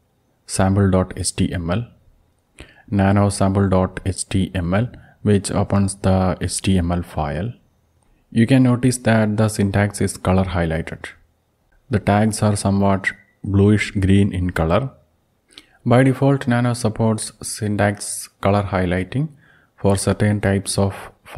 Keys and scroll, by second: 2.6-6.9 typing, 18.0 alt+Down, 18.2 alt+Down, 18.4-19.7 alt+Down, 19.9 alt+Down, 20.3 alt+Down, 20.9 alt+Up.